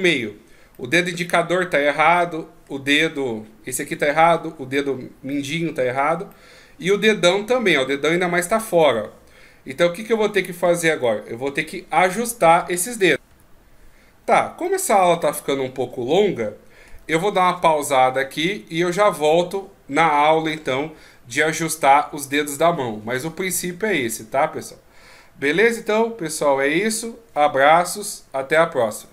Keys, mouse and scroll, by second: 0.8 middle click, 2.2 middle click, 5.3 middle click, 6.3 middle click, 14.6 middle click.